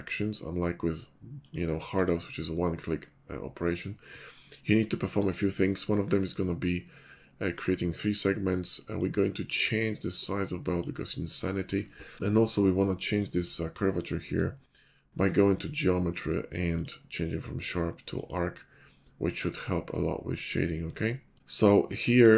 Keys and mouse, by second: 4.1-5.9 middle drag, 11.9 middle click, 13.4-14.7 shift+middle drag, 14.8 middle drag, 19.5-20.5 middle drag.